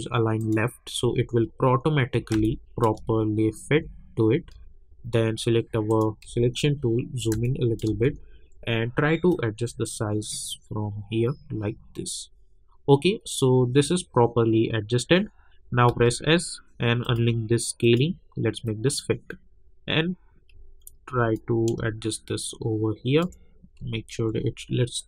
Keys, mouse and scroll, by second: 0.4 click, 1.3 alt+scroll up 1, 1.9 alt+scroll down 1, 2.3 space, 2.4 click, 2.8 space, 3.9-4.4 alt+scroll down 1, 4.7 alt+scroll down 1, 5.9 click, 6.8 alt+scroll up 1, 7.4 click, 7.8 space, 8.2-8.5 alt+scroll up 1, 9.3-15.4 drag, 15.4 scroll down 1, 15.9 s, 17.0 click, 20.7-21.3 alt+scroll up 2, 21.3-23.9 drag, 23.9-25.0 alt+scroll up 2.